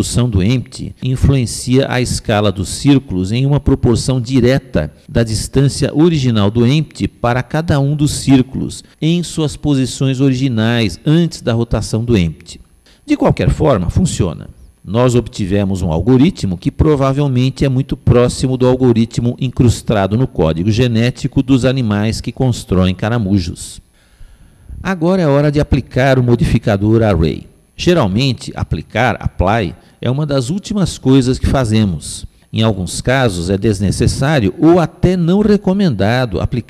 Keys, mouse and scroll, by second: 4.6-6.3 middle drag, 6.8-8.7 middle drag.